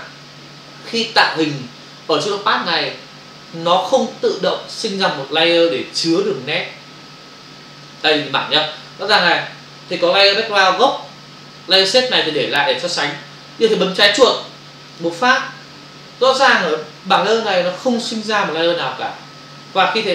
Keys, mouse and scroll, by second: 15.0 click.